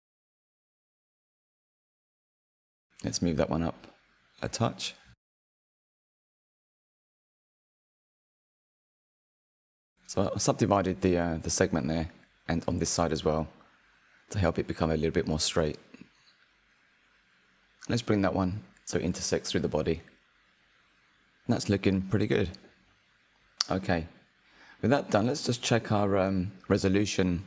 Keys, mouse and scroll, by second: 0.6 click, 1.6 click, 3.1-4.3 drag, 6.8 click, 7.2 click, 7.3 shift+click, 7.6 click, 7.8 s, 8.8 shift+click, 9.3 right click, 10.1 click, 10.2 click, 10.5 click, 11.8 click, 12.1 shift+click, 12.2 right click, 12.8 click, 13.1 click, 14.4 click, 14.8 click, 14.9 click, 15.9 click, 16.5 click, 16.6 shift+middle click, 16.9 click, 17.5 shift+middle click, 17.9 click, 19.1 Tab, 19.8 click, 20.1 scroll down 4, 20.5 click, 20.8-27.4 middle drag, 23.1 scroll, 23.8-25.0 scroll up 9, 25.0-27.1 scroll up 2.